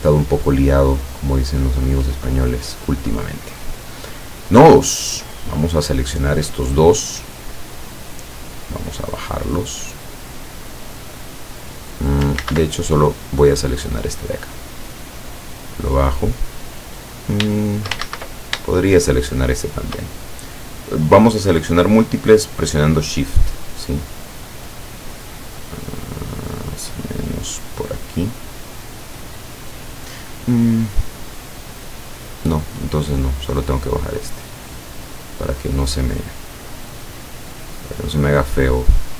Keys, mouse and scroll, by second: 0.1 ctrl+click, 1.2-1.8 ctrl+scroll down 4, 3.6 click, 5.4-7.0 drag, 8.6-12.4 drag, 12.5 ctrl+z, 13.2 click, 14.8-17.1 drag, 18.1 ctrl+shift+z, 19.7 shift+click, 24.3-32.6 drag, 32.7 click, 33.4-35.7 drag, 36.4-37.7 drag, 38.2-39.1 drag.